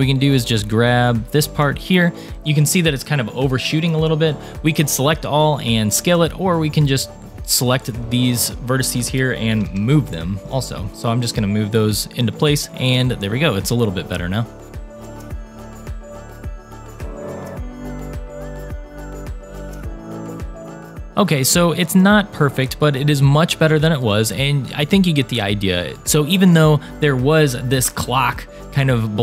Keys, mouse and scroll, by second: 0.1 shift+click, 0.4 shift+click, 1.2 shift+click, 1.6 shift+click, 2.3 shift+click, 2.3 scroll down 2, 2.4 shift+middle click, 3.8-4.3 scroll down 1, 4.6-5.1 scroll down 2, 6.1-7.4 drag, 7.8 scroll up 2, 8.3 shift+middle click, 9.1 g, 12.0 click, 12.4 middle click, 13.5-14.6 middle drag, 14.6 click, 14.6 scroll up 1, 14.7 shift+middle click, 14.8 scroll down 1, 15.2 shift+click, 15.4 middle click, 15.8-17.8 typing, 16.5 click, 16.6 middle click, 16.8 click, 17.3 click, 17.4 click, 18.9 click, 18.9 middle click, 19.1 click, 19.2 g, 19.6 click, 19.8 scroll down 1, 19.8 middle click, 20.1 click, 20.2 scroll up 2, 20.3 shift+middle click, 20.4 a, 20.4 u, 20.7 g, 21.1 shift+middle click, 21.1 click, 21.5-23.8 middle drag, 23.1-23.8 scroll down 1, 23.9 middle click, 25.9 shift+middle click, 27.0 scroll down 2.